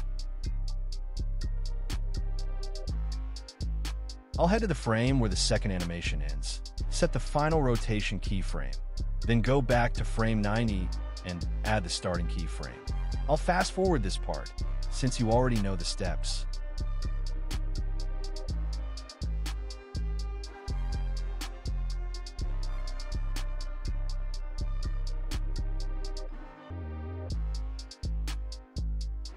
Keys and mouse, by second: 1.0 middle click, 1.3 drag, 2.7 shift+click, 3.0-5.0 typing, 4.7 click, 6.7 middle click, 7.0 KP_0, 7.4 click, 8.2 click, 9.0 click, 10.2-11.3 drag, 11.3 i, 12.5 click, 13.7 Delete, 14.2 click, 15.5 i, 16.0 click, 16.4 click, 17.3 r, 17.4 z, 18.0 click, 18.3 r, 18.4 z, 19.2 click, 19.7 Delete, 20.0 click, 20.9 click, 21.7 i, 22.0 click, 23.2 r, 23.3 z, 25.0 i, 25.6 space, 28.3 space, 29.2 click.